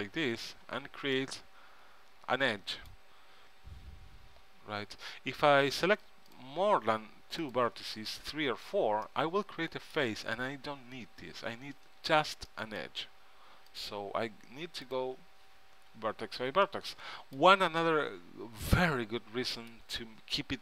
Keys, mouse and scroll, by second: 0.8 f, 4.8 ctrl+z, 6.5-9.2 drag, 8.8 f, 12.0 ctrl+z, 12.7-13.9 middle drag, 13.9-16.7 drag, 16.1 f, 17.0-19.8 middle drag, 20.3-20.6 middle drag.